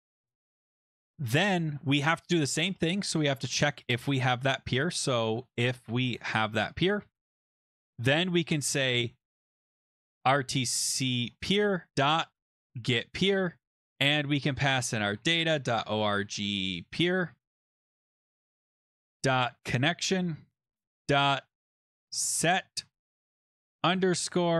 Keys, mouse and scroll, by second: 0.0-0.7 typing, 1.1-1.4 scroll, 3.8 click, 4.1 ctrl+c, 4.7 click, 4.8 ctrl+v, 5.3 ctrl+z, 5.6 click, 6.1 ctrl+v, 7.5 Return, 9.9-13.3 typing, 14.4-24.5 typing.